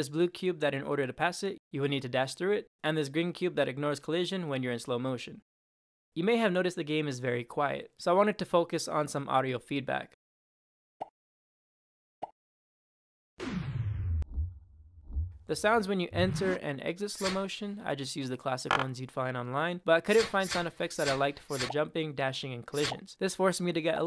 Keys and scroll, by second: 0.0-0.5 typing, 0.3 Right, 1.4 Up, 2.1 Up, 2.3 Right, 2.5 Down, 3.1 Right, 3.5 Right, 3.8 Right, 4.8 Right, 5.6 Up, 10.9 space, 12.1 space, 13.2 Down, 14.1 space, 14.9 space, 16.0 Down, 17.0 Up, 17.6 Left, 18.0 Left, 20.3 Up, 20.8 Up, 21.3 Up, 21.6 space, 22.6 Up, 22.8 space, 23.8 space.